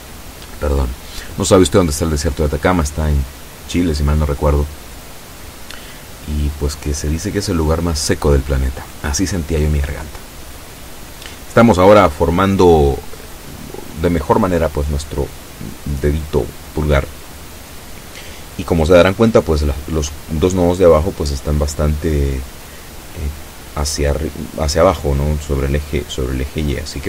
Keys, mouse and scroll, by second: 8.4-13.7 drag, 16.0 a, 16.9 b, 18.0-20.0 drag, 21.9 click, 23.1-25.6 drag, 26.1 a.